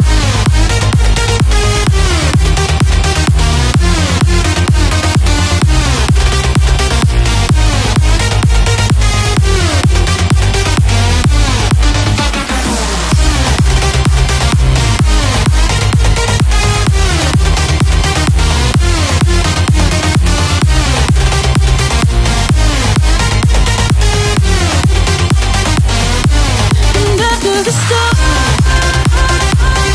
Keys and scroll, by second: 0.0-4.9 typing, 11.3 ctrl+t, 26.5 ctrl+t.